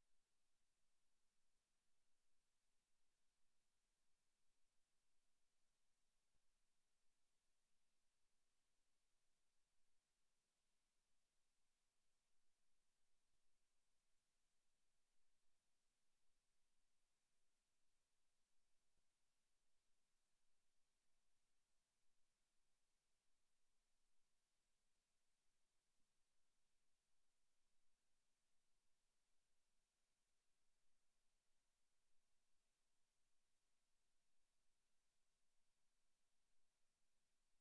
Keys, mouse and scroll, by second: 1.0 scroll down 1, 7.7 click, 26.5 right click, 28.6 right click, 29.3 right click, 32.8 click.